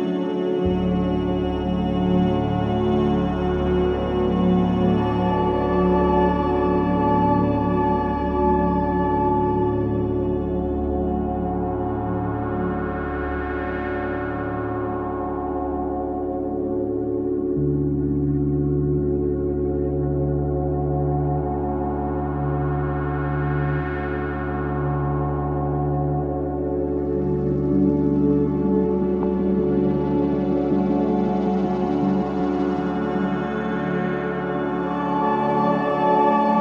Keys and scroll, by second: 3.9 3, 26.4 ], 28.5 ], 29.3 ], 32.8 ], 35.3 ctrl+z.